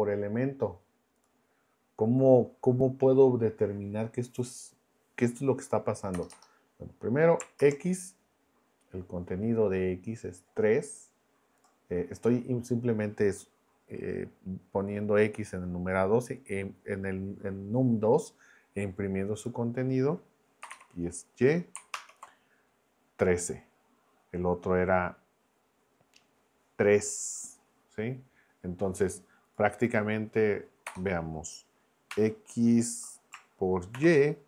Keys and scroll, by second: 6.1 BackSpace, 7.6 shift+Return, 20.6 BackSpace, 20.7 y, 21.9 ctrl+Return, 30.8 BackSpace, 32.1 x, 33.9 shift+8.